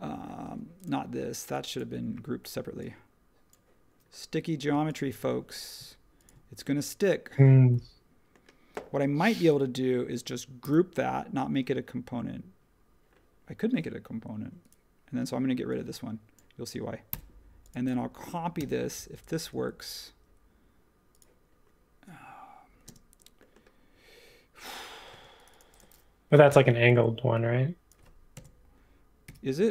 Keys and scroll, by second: 10.6 super+g, 17.1 BackSpace, 18.5 m, 22.8 space, 25.1 space, 26.5 p, 28.3 ., 29.2 5.